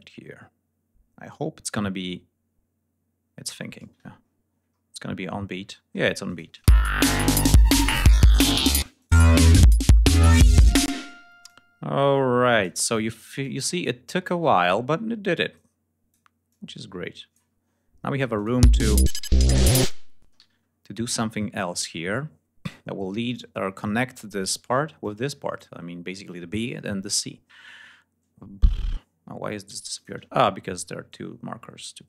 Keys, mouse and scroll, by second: 4.1 ctrl+scroll up 2, 4.7-5.2 ctrl+scroll up 2, 5.5 scroll down 2, 6.2 click, 6.4 space, 7.1 scroll down 2, 7.7-8.2 ctrl+scroll down 6, 8.7 ctrl+space, 8.9 click, 9.7-10.0 scroll down 2, 10.2-10.6 scroll up 2, 10.8 space, 11.3-12.7 drag, 13.3-14.3 drag, 14.5 ctrl+scroll up 2, 15.4 click, 16.4-17.4 drag, 17.4 ctrl+scroll down 2, 18.2 click, 18.4 space, 18.6 ctrl+scroll up 2, 19.6 ctrl+scroll down 2, 20.1 ctrl+space, 20.3 ctrl+g, 20.5 ctrl+scroll up 2, 22.1 ctrl+scroll down 2, 27.8 scroll down 2, 28.3 ctrl+scroll up 2, 29.8 ctrl+click, 31.0-32.0 drag.